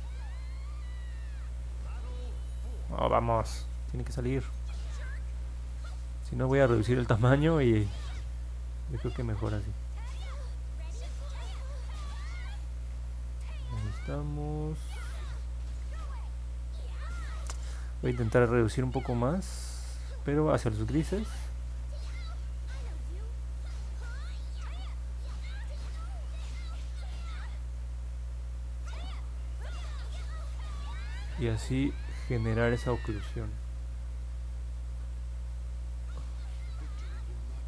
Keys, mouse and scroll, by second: 2.8 ctrl+z, 8.5-14.6 drag, 19.5-20.6 drag, 22.0-33.7 drag, 36.5-37.6 drag.